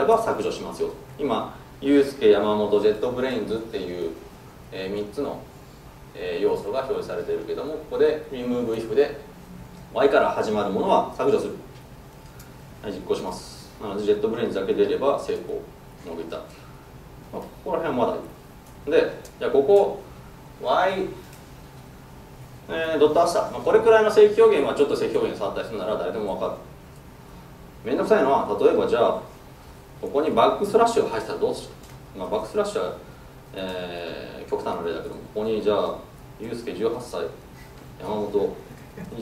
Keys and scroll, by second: 13.3 ctrl+shift+F10.